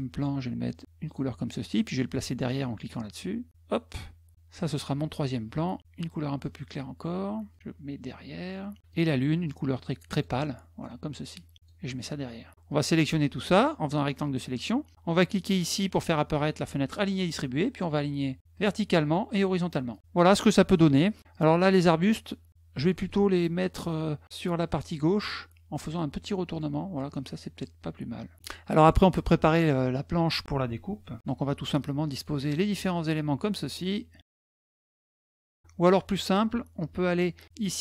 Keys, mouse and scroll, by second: 0.8 click, 3.3 click, 6.2-7.4 drag, 8.2 click, 9.9 click, 11.1 click, 12.3 click, 12.5-13.9 drag, 15.7 click, 18.4 click, 19.1 click, 19.7 click, 20.0 middle click, 20.5 middle click, 22.5 click, 26.3 click, 28.7 middle click, 31.1 click, 32.3 click, 33.5-34.5 drag, 34.8 click, 35.6 middle click.